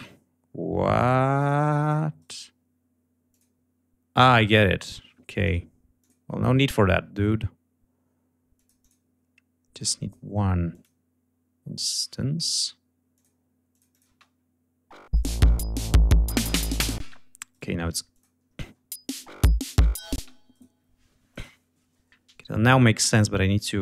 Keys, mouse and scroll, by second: 1.2 click, 2.1 right click, 3.2 click, 4.3 click, 5.3 click, 5.9 click, 8.4 click, 9.6 click, 10.6 click, 13.0 click, 13.8 click, 13.9 space, 15.0 click, 16.9 space, 17.4 right click, 18.0 click, 18.5 space, 20.0 space, 20.4 right click, 21.2 click, 22.9 click.